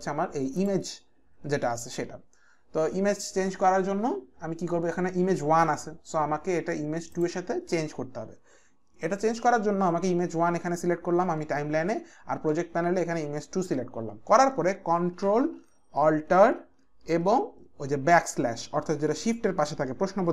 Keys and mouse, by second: 0.6 click, 7.1 click.